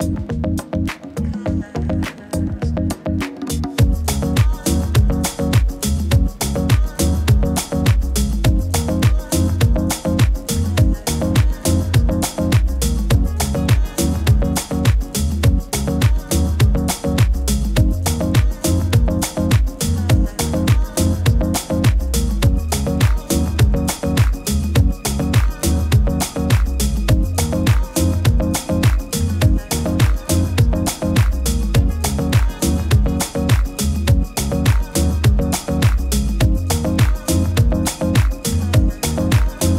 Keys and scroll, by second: 3.3 super+-, 3.5 super+-, 3.6 super+-, 11.8 super+-, 11.9 super+-, 12.0 super+-, 21.0 super+t.